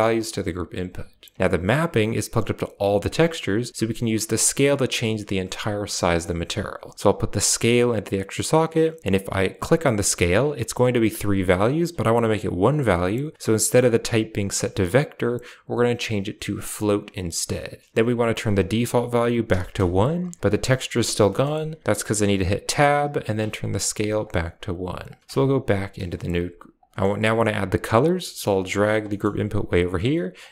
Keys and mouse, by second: 1.6 click, 4.7 middle click, 5.3 right click, 5.6 g, 6.8-7.5 drag, 7.6 click, 9.5 click, 14.3-16.8 drag, 18.4-19.7 drag, 21.1 middle drag, 22.5 Tab, 23.6 click, 24.9 click, 25.2 Tab, 26.3 g, 27.7 g, 28.2 click, 28.3 g, 28.9 middle click, 29.1 g, 30.3-30.5 drag.